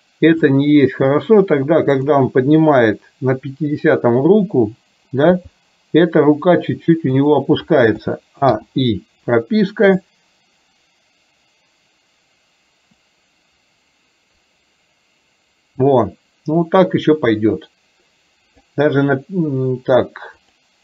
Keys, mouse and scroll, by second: 2.0 drag, 2.8-3.9 middle drag, 5.5 g, 8.0 a, 8.5 i, 10.0-18.8 drag, 20.4 click.